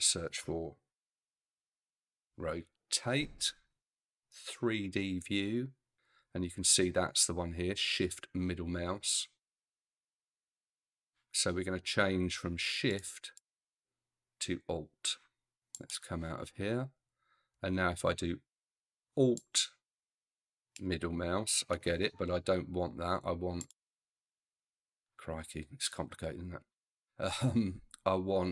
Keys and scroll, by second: 1.0-2.1 typing.